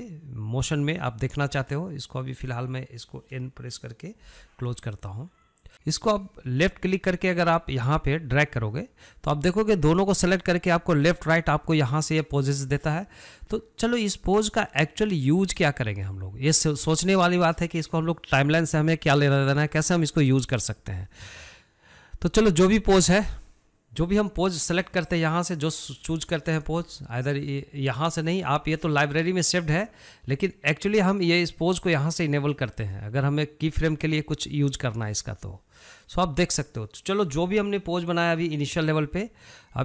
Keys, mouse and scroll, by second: 4.8 n, 5.7 shift+click, 6.7 shift+drag, 24.7 click, 25.7 click, 27.3 click, 27.8 click, 28.9 click, 29.4 click, 31.0 click, 31.9 click, 32.5 click, 33.0 drag, 33.4 click, 34.7 click, 35.5 click, 36.6 click, 38.8-39.8 drag.